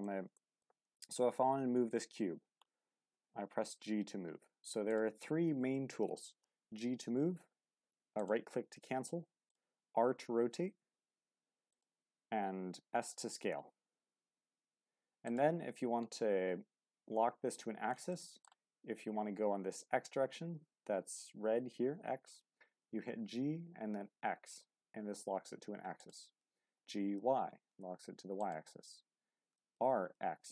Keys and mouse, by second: 0.4 shift+middle drag, 8.2 right click, 8.6 g, 9.5 right click, 10.0 r, 11.7 right click, 12.8 s, 15.2 right click, 16.1-17.5 middle drag, 18.1-18.4 middle drag, 24.0 x, 26.0 click, 26.7 g, 27.0 y, 29.6 r, 29.9 x.